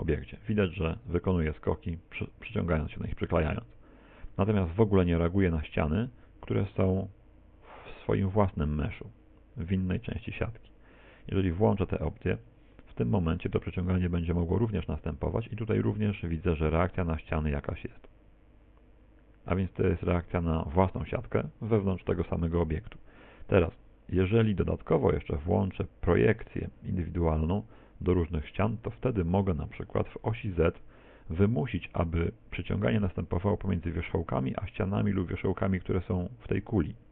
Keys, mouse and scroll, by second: 14.6 g.